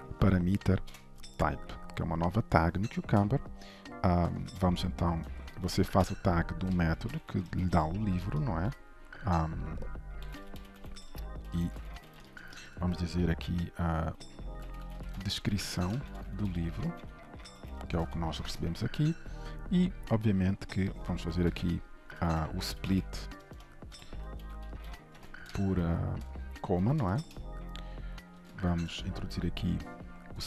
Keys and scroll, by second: 1.0 Return, 4.5 shift+Return, 5.9 Return, 18.1 ctrl+shift+Return, 22.1 Return, 27.1 ctrl+shift+Return, 28.5 alt+Return.